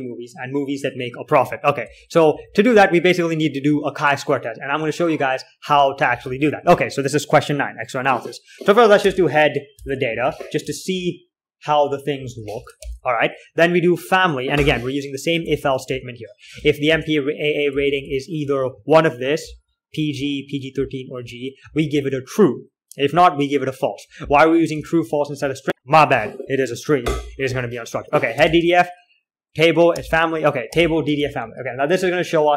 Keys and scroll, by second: 2.4 alt+3, 2.7 j, 3.1 j, 3.3 j, 4.8 typing, 5.8-7.0 typing, 9.4 space, 9.4 d, 10.1 ctrl+l, 10.5-14.1 typing, 15.2-18.0 typing, 19.9-21.1 typing, 23.0-26.2 typing, 28.8 typing, 30.3-32.5 typing, 31.5 ctrl+l.